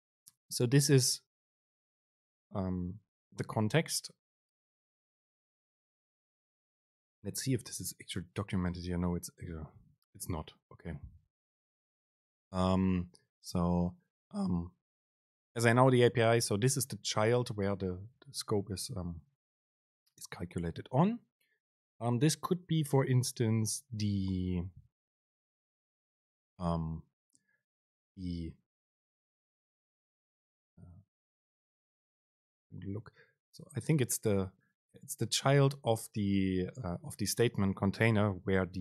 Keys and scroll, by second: 16.8 Right, 18.3 shift+Left.